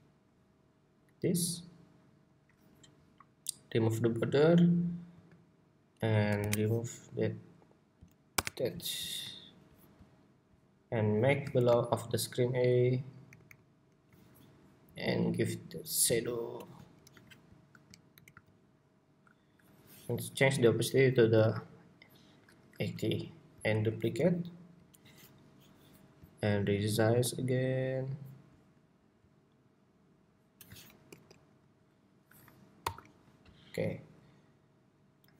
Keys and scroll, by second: 17.8 alt+shift+Right, 23.5 super+d, 24.8 super+d.